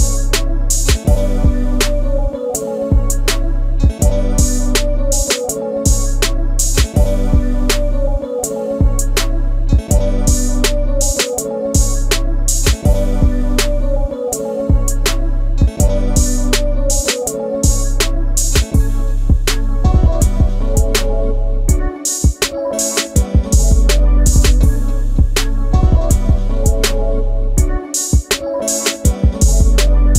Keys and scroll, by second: 4.1 shift+space, 5.4 m, 11.0 shift+space, 11.8 m, 14.7 shift+space, 18.3 shift+space, 18.4 Escape, 20.0 e, 21.2 space, 21.3 Escape, 21.5 Escape, 24.4 Delete, 24.5 Delete, 25.4 m, 26.5 shift+q, 28.8 space.